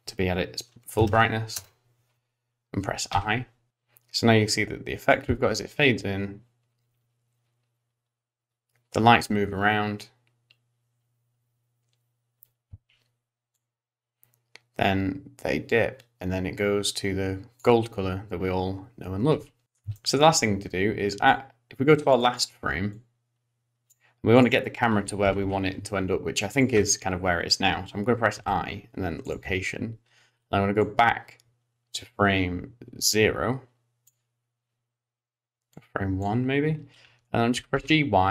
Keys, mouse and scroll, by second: 3.7 click, 5.3 space, 12.8 space, 13.6 click, 19.4 space, 19.6 middle click, 19.6 scroll down 3, 19.6 space, 20.0 shift+middle click, 21.3 click, 22.3 click, 22.9 click, 24.4 click, 25.3 g, 30.9 click, 30.9 i, 35.8 click, 37.1-38.3 scroll down 2, 37.6 g.